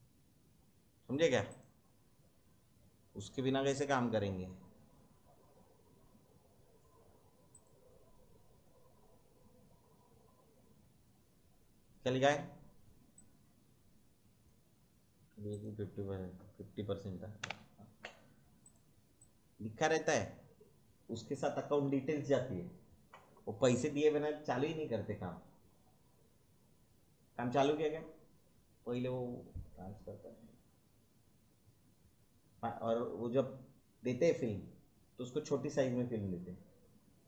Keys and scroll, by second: 17.4 5.